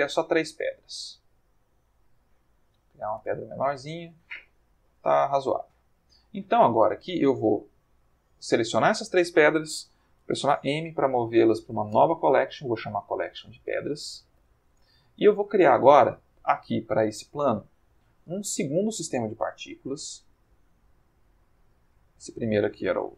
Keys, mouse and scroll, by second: 0.0 click, 0.5 click, 0.6 g, 1.4 click, 1.9 a, 2.3 s, 3.0 click, 3.2 Tab, 4.1-6.2 middle drag, 7.4-7.9 drag, 10.5 m, 11.9 Return, 13.1-14.5 typing, 14.7 Return, 16.3 click, 20.1 click, 21.6 click.